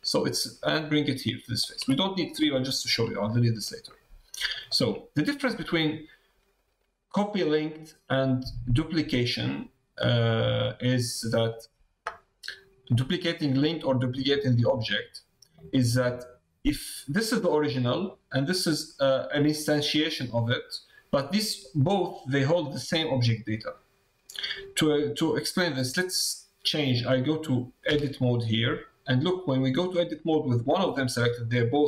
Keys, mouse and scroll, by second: 2.0 middle click, 2.6 shift+middle click, 3.6 middle click, 4.5 shift+middle click, 9.5 middle click, 10.0 click, 10.0 middle click, 10.2 click, 10.2 middle click, 10.4 click, 10.4 middle click, 11.4 click, 12.9 middle click, 14.1 middle click, 15.5 middle click, 27.9 Tab, 28.8 middle click.